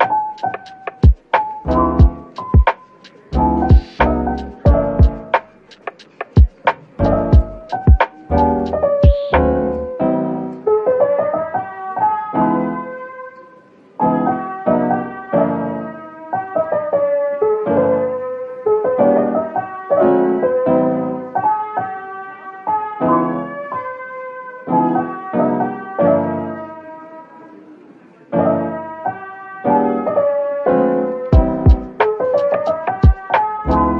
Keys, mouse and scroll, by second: 10.8 shift+click, 12.4 z, 15.7 z, 15.8 shift+click, 20.4 Tab, 21.3 shift+click, 22.2 z.